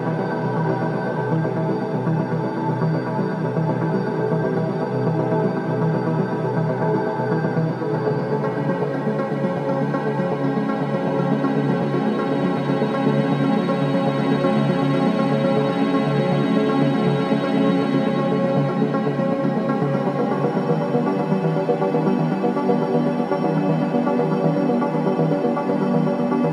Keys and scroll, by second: 0.6 F12, 0.6 v, 11.3 t, 14.2 space, 17.6 v.